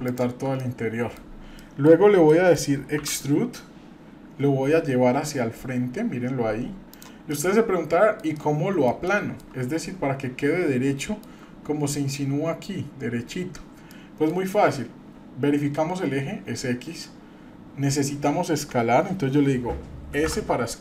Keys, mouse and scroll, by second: 0.0 shift+click, 0.6 middle click, 1.6 middle click, 2.3 middle click, 3.0 e, 7.4 middle click, 8.3 middle click, 9.1 shift+middle click, 11.0-11.4 shift+middle drag, 11.9-13.6 scroll up 1, 13.9 middle click, 14.3-14.9 scroll down 2, 20.3 s.